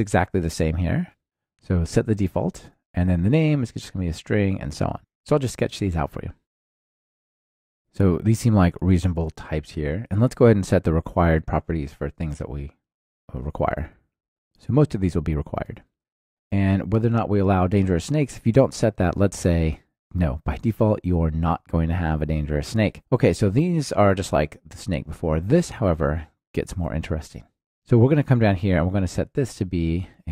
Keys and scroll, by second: 1.0 super+v, 1.1 Return, 2.9 ctrl+alt+shift+Left, 6.4 Return, 7.2 Return, 14.1 ctrl+alt+shift+Left, 14.7 super+c, 15.6 super+v, 18.9 Return.